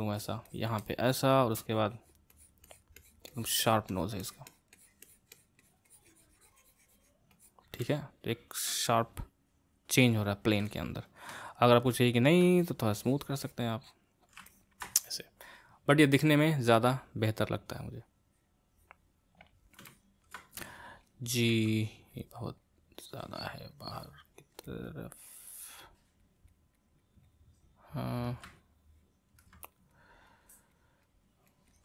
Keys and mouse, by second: 0.8 middle click, 1.7-7.8 drag, 7.8-12.6 middle drag, 12.6-14.5 drag, 14.5-17.9 ctrl+middle drag, 19.9-21.5 ctrl+middle drag, 21.5 g, 22.1-28.5 drag, 28.5-29.7 middle drag, 29.7-31.8 drag.